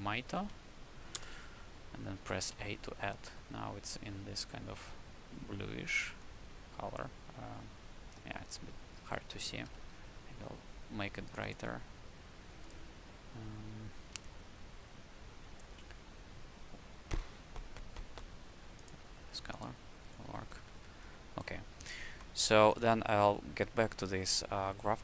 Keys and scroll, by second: 0.0-1.0 typing, 1.1 Return, 2.5 a, 4.0 a, 9.6 w, 20.2 q.